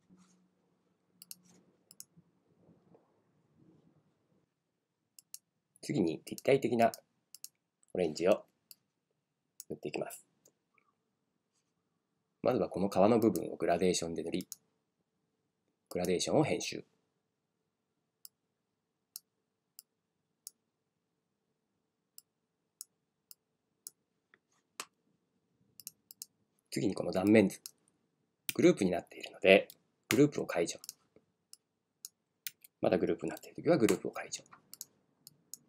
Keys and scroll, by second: 8.4 space, 28.5 super+z, 32.5 super+z.